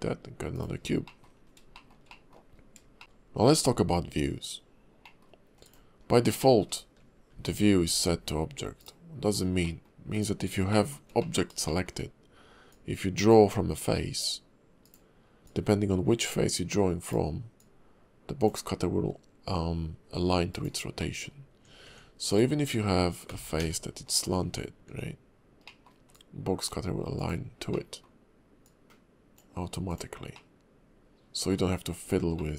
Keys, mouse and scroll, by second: 1.0 middle click, 1.4 scroll up 2, 1.7 shift+middle click, 2.1 middle click, 2.5-2.8 scroll up 1, 3.0 shift+a, 5.0 middle click, 5.6 click, 6.4 shift+middle click, 7.4 shift+v, 8.8 right click, 9.6 middle click, 10.1 click, 10.7 shift+middle click, 11.2 middle click, 11.7 shift+middle click, 12.7 click, 15.4 click, 17.5 click, 21.0 middle click, 21.9 Tab, 22.3 click, 23.3 g, 24.5 Tab, 24.9 Tab, 25.6 middle click, 26.1 click, 27.7 middle click, 28.6 click, 30.3 middle click, 32.3 middle click.